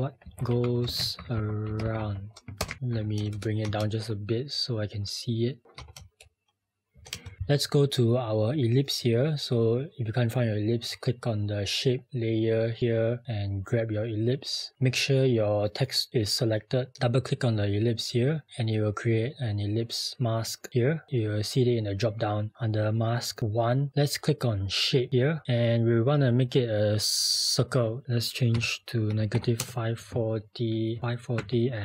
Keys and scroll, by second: 0.0-1.1 typing, 2.4-3.1 typing.